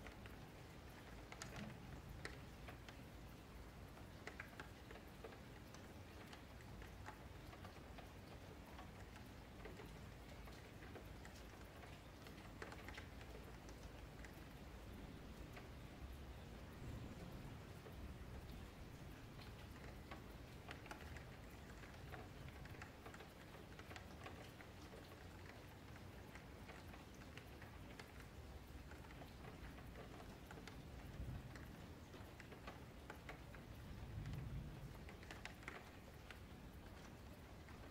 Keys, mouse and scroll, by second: 0.5 scroll down 4, 0.8-1.2 middle drag, 1.2 ctrl+z, 4.1-5.2 middle drag, 5.2-6.6 drag, 6.6 middle click, 6.9 click, 7.8 h, 8.8 ctrl+z, 9.3 click, 10.0 g, 11.2 shift+Tab, 11.5 click, 12.0 middle click, 12.7 ctrl+z, 13.0 ctrl+z, 13.3 ctrl+z, 13.7 ctrl+z, 14.9-15.9 middle drag, 15.9 click, 16.3 g, 17.3-17.9 middle drag, 17.9-18.2 scroll up 4, 18.2-21.3 shift+middle drag, 21.5-23.0 middle drag, 23.0 click, 25.2 click, 25.5 scroll down 2, 25.8-27.1 middle drag, 27.1-28.4 drag, 28.9 Tab, 30.4 g, 31.9-32.4 scroll up 2, 32.4 ctrl+z, 32.6 ctrl+z, 33.4 Tab, 33.8 scroll down 1, 34.0-37.9 middle drag.